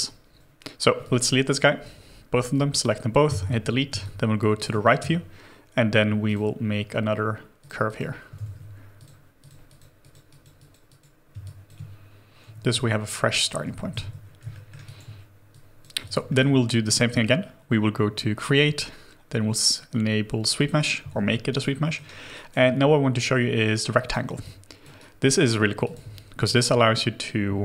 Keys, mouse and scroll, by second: 3.2 Delete, 3.9 space, 7.8 double click, 8.3 ctrl+z, 9.4 double click, 11.2 space, 12.4 w, 12.7 alt+click, 13.9 alt+click, 13.9 shift+g, 14.2 scroll down 1, 14.5 alt+middle click, 14.8 alt+click, 16.0 alt+click, 16.3 alt+middle click, 17.1 double click, 21.4 alt+right click, 21.8 alt+middle click, 22.3 alt+right click, 22.8 scroll up 1, 24.4 alt+click, 24.9 alt+right click, 25.4 alt+middle click, 25.8 alt+click.